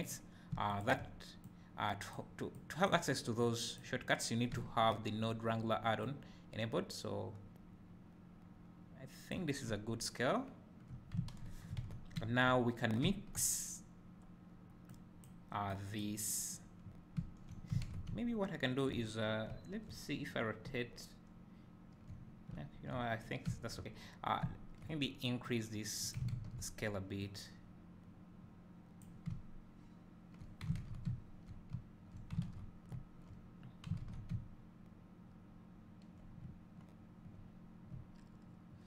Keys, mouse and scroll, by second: 0.0 click, 0.7 shift+click, 1.4 click, 2.5 click, 6.3-14.9 drag, 18.0 `, 25.5-38.8 drag, 26.4 ctrl+z, 29.3 `.